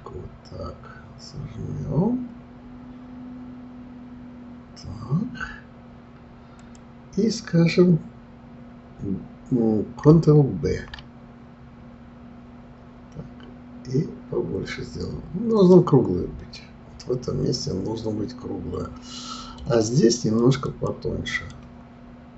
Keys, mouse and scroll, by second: 10.6 ctrl+b, 16.4 click, 17.0-20.0 middle drag, 20.4 click, 20.6 click, 21.3 click, 21.4-22.3 right drag.